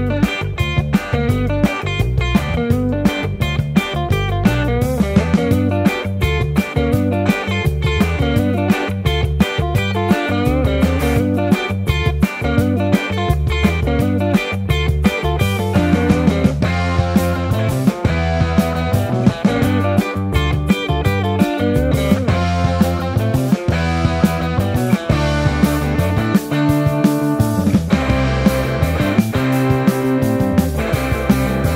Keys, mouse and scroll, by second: 0.6 ctrl+z, 1.2 ctrl+b, 2.4 Tab, 3.2 Tab, 3.8 KP_1, 6.6 KP_7, 7.0 r, 7.4 ctrl+z, 7.6 a, 7.8 r, 9.3-11.3 typing, 12.8 s, 12.9 y, 15.1 e, 17.2 alt+KP_1, 17.3 alt+z, 18.0 Tab, 18.2 Tab, 18.3 Tab, 18.6 ctrl+2, 19.0 Tab, 19.2 alt+z, 21.4 ctrl+r, 22.0 ctrl+z, 23.2 1, 25.8 ctrl+x, 28.8 m, 29.2 shift+middle click, 29.4 shift+middle click, 30.4 j, 31.4 j, 31.4 2.